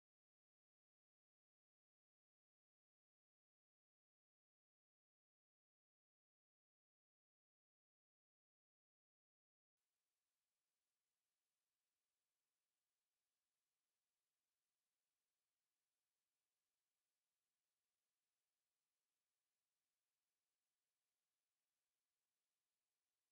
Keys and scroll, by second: 2.8 Down, 5.8 ctrl+s, 9.7 alt+e, 15.8 Tab.